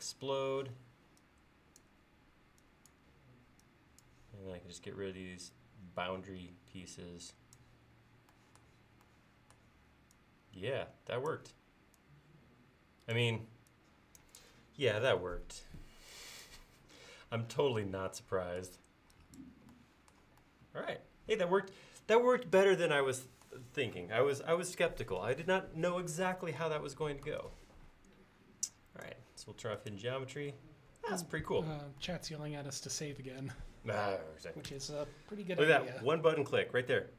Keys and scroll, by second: 0.6 e, 34.7 ctrl+s.